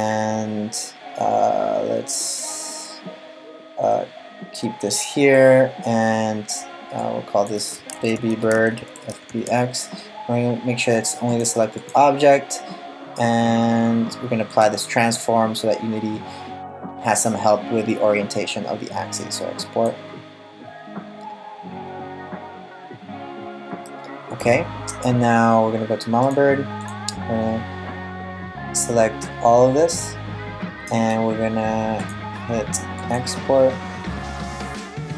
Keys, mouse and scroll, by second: 23.4 middle click, 25.9 click, 26.4 click, 28.8 click, 31.6 click.